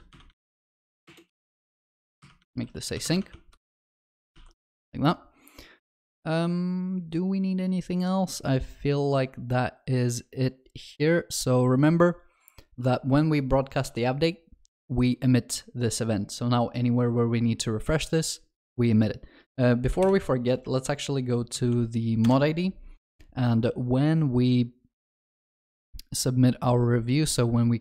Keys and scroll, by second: 3.3 ctrl+s, 4.1 ctrl+alt+shift+l, 4.4 ctrl+s, 13.9 ctrl+b, 20.1 ctrl+shift+n.